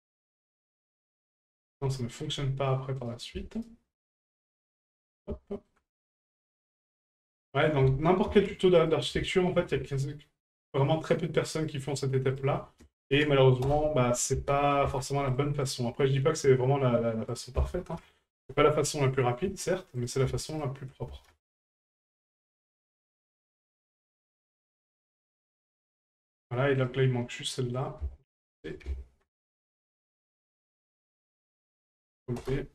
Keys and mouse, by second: 2.0 shift+middle drag, 3.0 right click, 3.6 shift+right click, 4.1 shift+right click, 5.5 shift+middle click, 6.5 right click, 7.5-9.0 drag, 12.3-13.7 drag, 17.4-18.5 ctrl+drag, 20.0 right click, 20.5 shift+right click, 21.9 shift+right click, 22.3 shift+right click, 23.8 right click, 24.4 shift+right click, 24.8 shift+right click, 26.8 right click, 27.7-28.8 drag, 31.1-32.5 ctrl+drag.